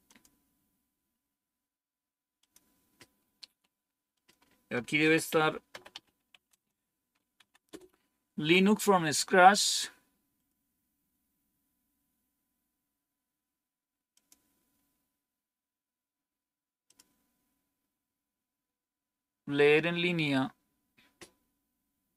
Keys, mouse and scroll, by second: 0.0 click, 2.3 click, 4.1 click, 4.7-6.8 typing, 7.3 Down, 7.6 Return, 10.3 click, 14.1 click, 16.8 click, 18.1-18.6 scroll down 2, 19.7 scroll down 2.